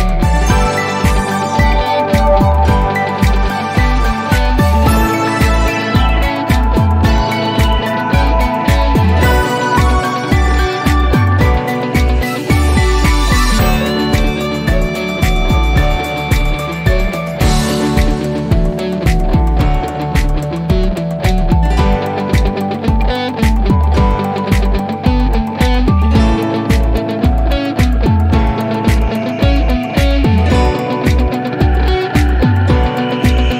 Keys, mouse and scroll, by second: 1.9 click, 3.1 shift+click, 7.5 click, 10.0-11.4 scroll up 1, 11.8 click, 15.2-16.2 drag, 21.1-21.8 drag, 22.8 1, 23.7 Return, 27.6 click, 28.4-29.5 scroll down 1, 29.5-30.2 click, 30.7 scroll up 1.